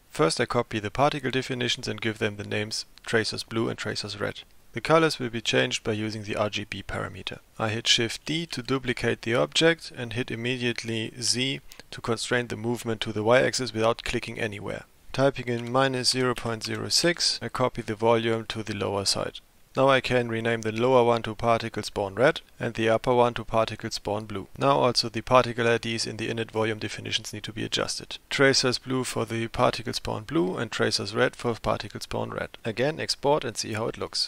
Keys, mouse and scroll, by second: 0.2-2.1 drag, 4.5 ctrl+v, 8.5 shift+d, 19.9 F2, 21.6 BackSpace, 22.5 click, 22.9 F2, 28.2-32.6 drag.